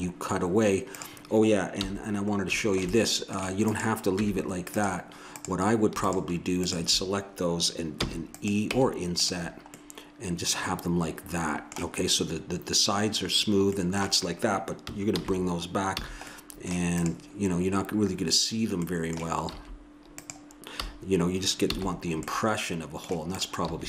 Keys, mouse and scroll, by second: 0.9-3.0 drag, 1.8 h, 3.7-4.9 drag, 4.2 Tab, 7.9 e, 8.7 Tab, 11.1 middle click, 13.7-15.1 middle drag, 15.1 alt+h, 15.9 a, 17.0-18.3 right drag, 18.3 click, 19.5 s, 21.6 a, 23.3-23.8 right drag, 23.6 s.